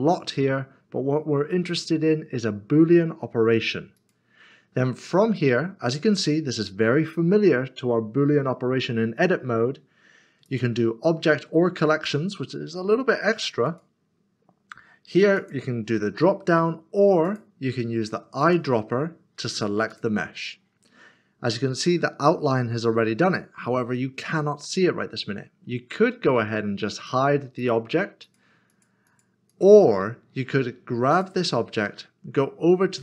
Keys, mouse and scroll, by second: 3.9 click, 10.4 click, 13.7 click, 26.9 click, 28.7 double click, 31.1 click.